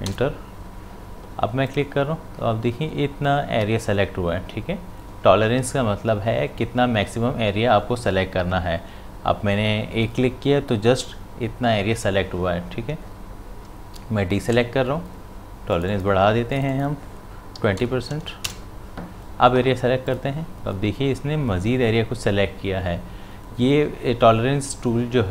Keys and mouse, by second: 1.6 click, 14.4 ctrl+d, 15.7 click, 20.1 click.